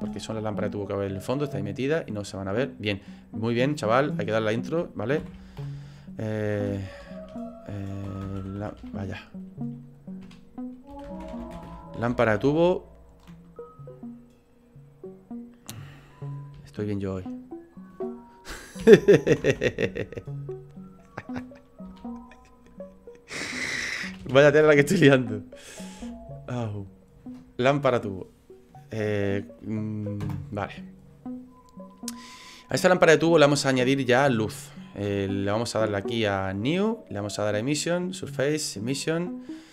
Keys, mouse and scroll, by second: 3.5 click, 3.7 click, 24.2 BackSpace, 32.1-32.8 scroll down 1, 32.8 middle click, 32.8 scroll down 3, 36.6 click, 37.7 click.